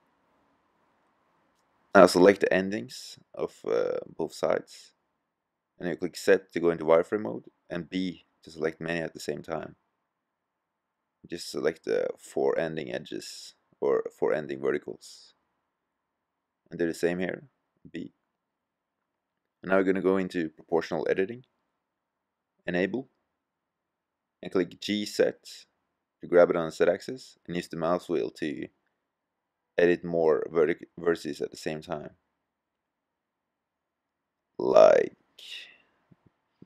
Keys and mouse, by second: 0.9-2.1 middle drag, 2.1 a, 6.3 z, 7.9 b, 14.9 b, 24.1 g.